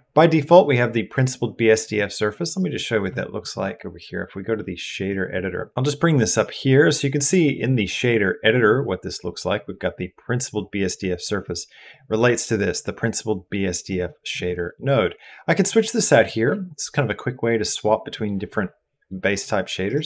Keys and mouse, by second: 2.4 click, 3.8-4.9 drag, 6.4 middle click, 11.3 click, 12.3-13.9 drag, 15.6-18.3 drag, 19.7-20.0 drag.